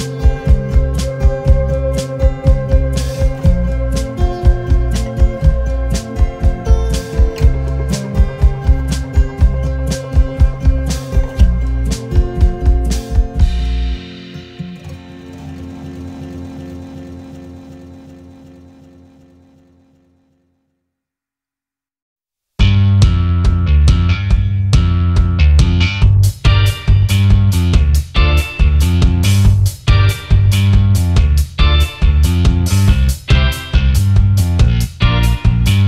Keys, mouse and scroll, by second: 4.4 double click, 6.5-8.4 scroll down 1, 12.4-13.2 scroll up 1, 13.2-13.6 scroll down 1, 15.5-17.5 scroll up 1, 18.8 double click, 19.1 alt+scroll down 1, 20.5-20.9 alt+scroll up 1, 21.1 space, 22.3 alt+scroll up 1, 32.4 double click.